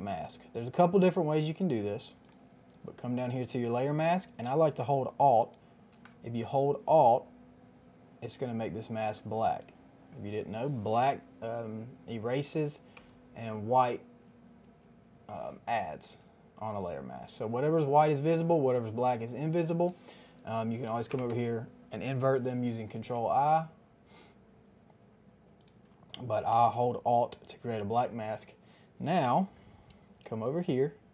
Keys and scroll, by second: 12.9 ctrl+i, 21.0 ctrl+i.